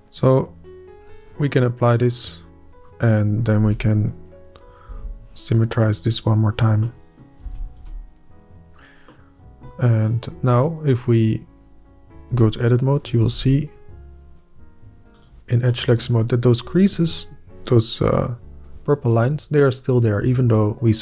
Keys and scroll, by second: 3.6 Up, 4.1 Up, 4.9 Up, 5.4 Up, 7.4 alt+a, 7.8 Tab, 8.3 Up, 12.3 Up, 12.9 Up, 14.3 Up.